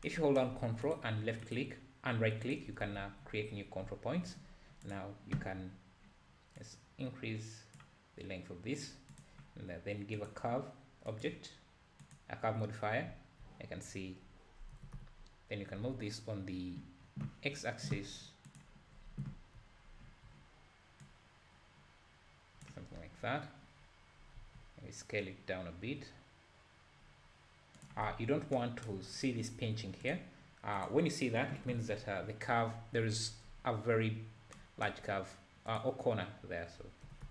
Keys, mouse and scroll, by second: 0.9 ctrl+right click, 1.6 ctrl+right click, 2.5 ctrl+right click, 2.9 Tab, 3.8 `, 4.5-4.9 scroll up 1, 4.9 click, 6.9-11.3 drag, 13.1 `, 14.8 g, 18.9 scroll down 1, 19.2 `, 19.9 scroll down 1, 20.0 `, 21.1 click, 23.0-23.5 scroll up 3, 23.5-24.2 scroll up 1, 24.4 s, 29.2-29.8 scroll up 1, 30.1 click, 30.9 click, 31.6 KP_7, 35.8 click, 37.1 g.